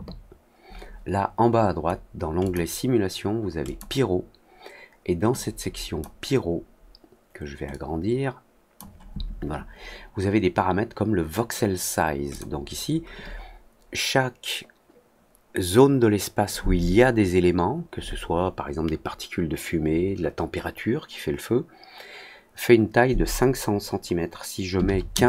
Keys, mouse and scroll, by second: 2.3 click, 3.6 click, 5.3 click, 7.6-8.7 drag, 12.2 click.